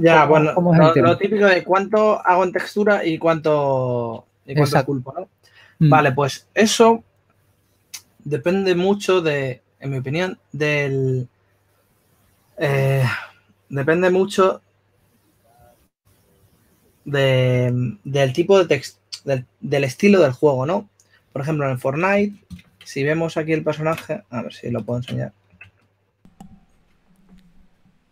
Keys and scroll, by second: 23.4 super+Tab, 27.2 super+Tab.